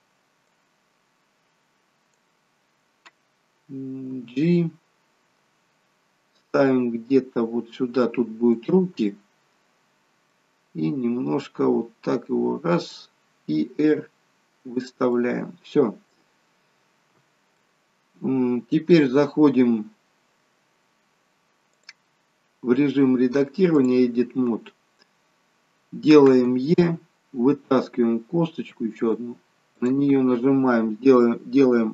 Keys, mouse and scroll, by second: 0.6 click, 4.2 g, 9.2 middle click, 11.4 click, 14.0 r, 15.2 middle click, 17.8 middle click, 21.8 click, 25.2 scroll down 2, 26.9 e, 29.9 click.